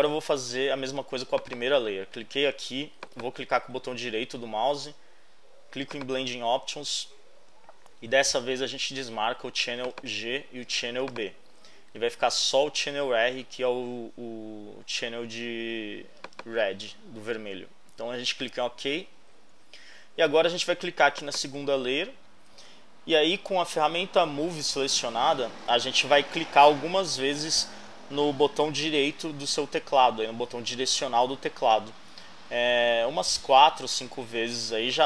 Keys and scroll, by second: 32.3 Right, 33.4 Right.